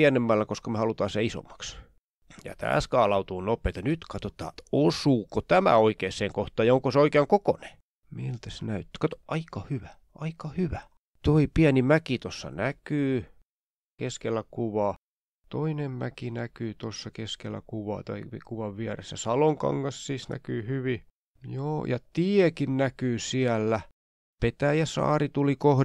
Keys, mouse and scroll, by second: 0.0-3.7 typing, 5.3 click, 8.5-9.0 ctrl+scroll down 2, 9.5 click, 9.9 click, 10.6 click, 11.4-11.7 ctrl+scroll up 2, 11.7-17.6 drag, 18.2 ctrl+scroll down 2, 18.4 ctrl+scroll up 4, 19.4 click, 20.5-24.0 drag, 24.4 scroll up 2, 25.0-25.8 shift+scroll down 5.